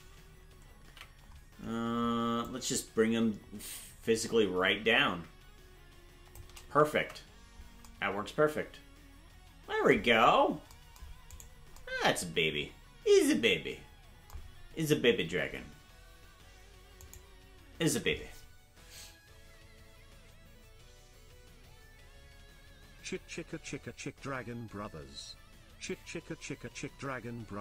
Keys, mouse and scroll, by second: 0.8 ctrl+l, 2.4-6.3 drag, 7.0 Tab, 10.2-10.7 scroll down 2, 11.3-11.7 right drag.